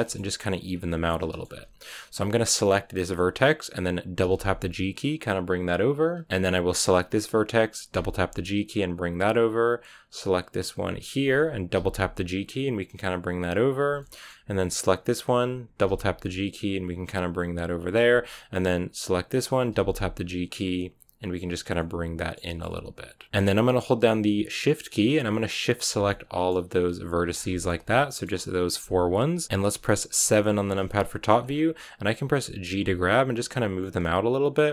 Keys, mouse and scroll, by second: 0.8-3.0 middle drag, 3.0-4.1 right drag, 4.1 g, 6.7 right click, 7.8 g, 10.9 right click, 11.8 g, 13.9 shift+middle click, 14.8 right click, 15.8 g, 18.9 right click, 19.2 scroll up 1, 19.6 g, 21.5 scroll down 3, 21.7-23.3 middle drag, 23.3-24.1 scroll up 2, 24.8-26.0 shift+right drag, 26.0-27.0 shift+middle drag, 27.0 shift+right click, 27.2 scroll down 2, 27.4 shift+middle click, 30.2 KP_7, 30.9 shift+middle click, 31.3 scroll up 4, 32.5 g, 33.9 middle click, 34.6 g.